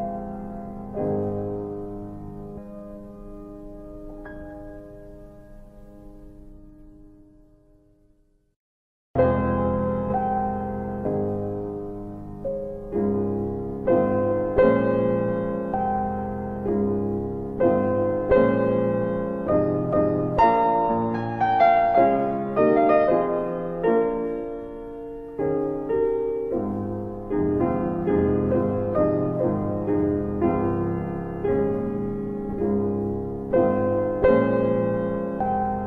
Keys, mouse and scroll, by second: 0.4 click, 1.9 alt+middle click, 3.0 Delete, 3.0 ctrl+click, 4.1 alt+middle click, 5.5 click, 6.5 Delete, 8.4 click, 9.2-13.3 click, 14.9 click, 15.8 click, 16.6 ctrl+z, 17.6 click, 21.5 middle click, 22.3 click, 23.5 middle click, 24.4 click, 25.6 alt+middle click, 29.3 click, 29.8 alt+middle click, 31.2 click, 31.7 double click, 32.6 double click, 34.2 alt+w, 35.2 alt+w.